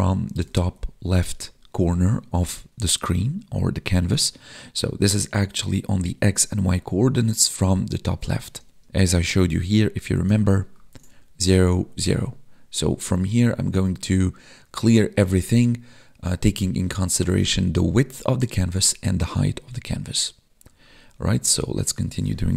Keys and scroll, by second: 8.8 alt+Tab.